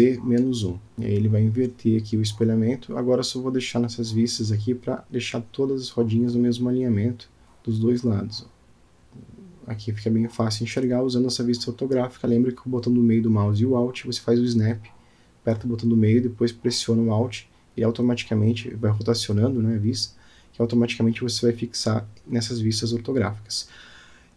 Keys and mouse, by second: 1.8 click, 2.5 click, 3.3-4.5 middle drag, 4.8 click, 5.3 click, 6.2 g, 9.0 click, 10.2-10.7 shift+middle drag, 11.7 g, 13.8 shift+middle click, 15.3 click, 16.1 g, 20.7 click, 21.5-22.1 middle drag, 22.6-23.1 shift+middle drag.